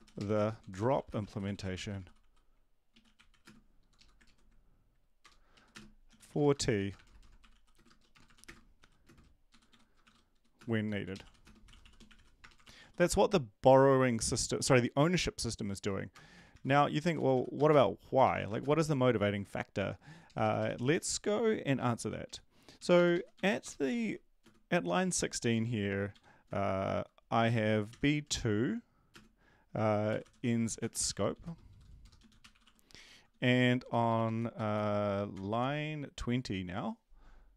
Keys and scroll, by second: 0.0-3.4 typing, 3.8 Left, 3.9 Left, 4.2 ctrl+., 5.8-13.3 typing, 16.9-19.0 typing, 21.7-22.3 Down, 22.3 Up, 22.7 Up, 22.9 Up, 23.3 End, 23.6 Return, 23.8-24.4 typing, 26.1 End, 26.4 space, 30.7-33.1 typing, 33.3 shift+Home, 33.7 ctrl+c, 33.9 Down, 34.0 Down, 34.2 Down, 34.5 End, 34.7 space, 35.3 Return.